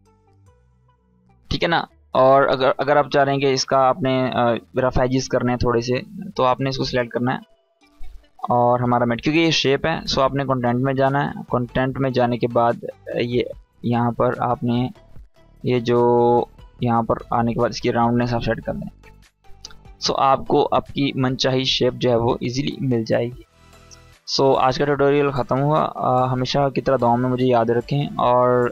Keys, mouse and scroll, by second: 6.5 click, 8.9-9.6 scroll down 1, 9.8 click, 11.9 scroll down 1, 12.8 click, 13.3-15.2 scroll down 1, 15.9-19.0 drag, 22.3-23.1 scroll down 1, 23.1-23.8 click, 24.1-26.0 scroll down 1.